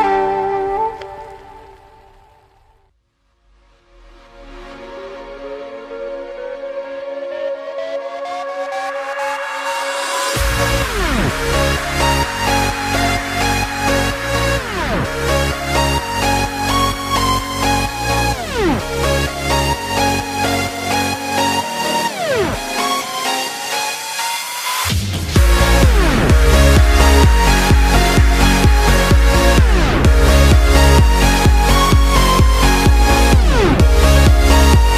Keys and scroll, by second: 1.7 x, 6.0 x, 30.1 x.